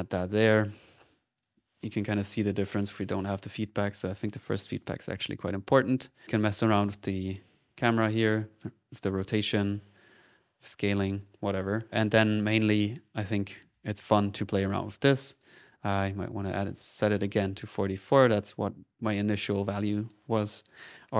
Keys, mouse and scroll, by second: 0.6 middle click, 1.3 middle click, 1.3 click, 3.0 click, 4.9 middle click, 5.5 click, 6.1 click, 6.4 click, 8.1-9.3 drag, 9.9 click, 10.5 click, 11.8 middle click, 11.8-12.3 scroll up 1, 12.3 click, 12.8 middle click, 12.8 click, 13.4 middle click, 13.7 click, 15.0 click, 16.7 click, 19.0 click.